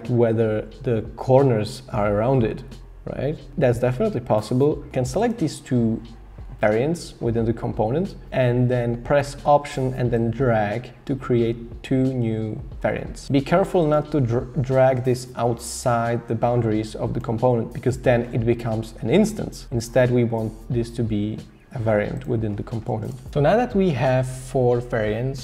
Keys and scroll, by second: 23.1 BackSpace.